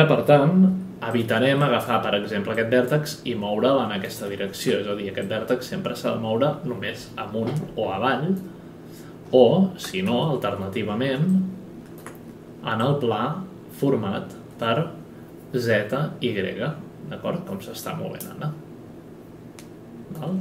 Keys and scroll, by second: 0.6 F9, 4.2 ctrl+z, 10.0 space.